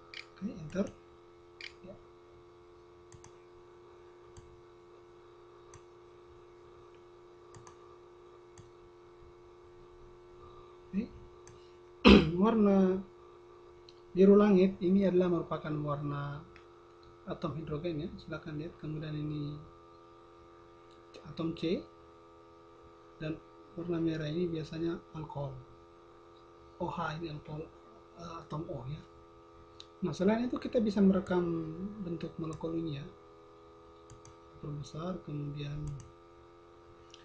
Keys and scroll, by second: 0.0-1.4 typing, 1.8 Return, 2.3 Return, 3.0 \.